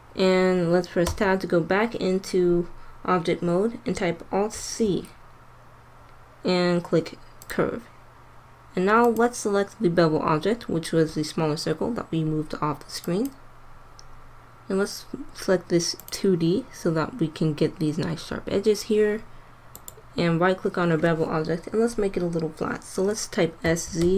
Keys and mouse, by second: 1.1 Tab, 4.4 alt+c, 8.9-10.8 drag, 15.9-19.7 drag, 19.7-21.3 right drag, 23.6 s.